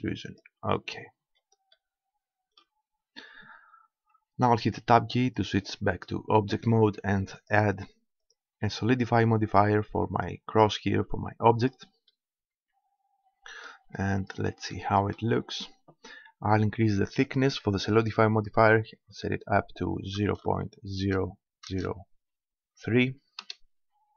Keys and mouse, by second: 0.4-1.7 drag, 1.7-3.1 middle drag, 3.1 Tab, 7.3-10.0 drag, 12.1-15.7 middle drag, 17.3-19.3 drag.